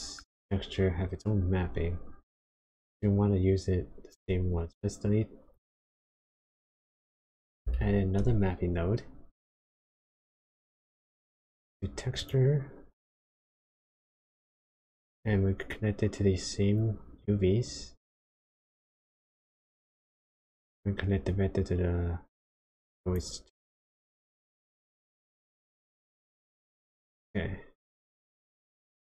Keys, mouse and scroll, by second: 2.7 ctrl+right click, 5.4 click, 7.5 click, 7.7 shift+a, 12.1 click, 14.7 click, 16.8 click, 21.3 click, 27.0 click, 27.2 click, 28.9 ctrl+shift+click.